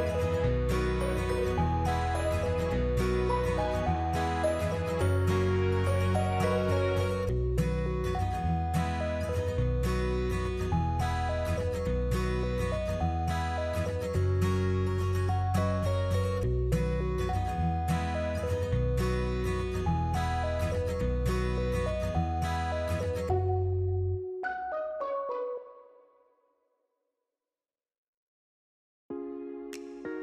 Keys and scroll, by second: 1.6-2.8 typing, 4.4 BackSpace, 4.6 s, 9.8-12.4 typing, 18.0-19.9 typing, 25.2 1, 25.6 Return.